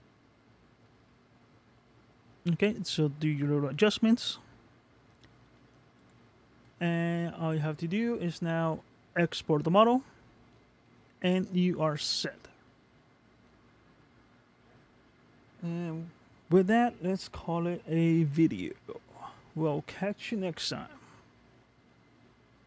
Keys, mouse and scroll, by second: 6.1 click, 6.7 scroll down 1, 7.1 middle click, 10.4-10.8 scroll down 2, 10.8 middle click.